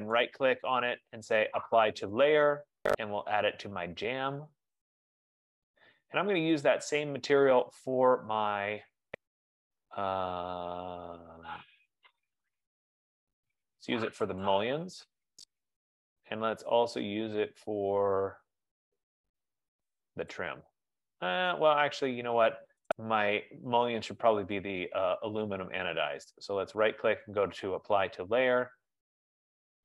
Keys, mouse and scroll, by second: 0.3 right click, 4.5 click, 6.8 right click, 14.5 click, 16.1 right click, 20.4 click, 23.0 right click, 24.8 click, 25.7 right click.